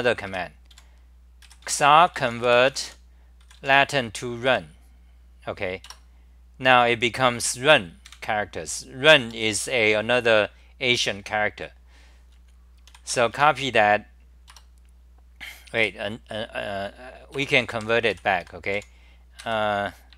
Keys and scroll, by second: 0.2 2, 0.9 a, 4.5 Right, 5.8 Return, 8.1 super+=, 10.4-12.9 scroll down 10, 12.8-13.8 typing, 14.5 Return, 17.3 Return, 17.7 k, 18.1 g, 18.8 a, 19.4 ctrl+g.